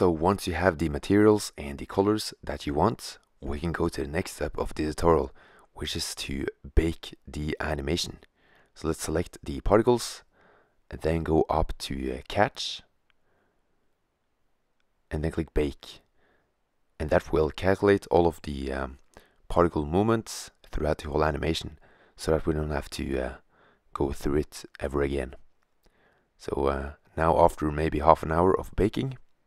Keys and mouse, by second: 0.9 middle drag, 1.1-1.8 drag, 3.1 middle click, 4.5 middle click, 6.3 shift+z, 8.0 right click, 9.9 right click, 12.8-14.2 middle drag, 15.1 click.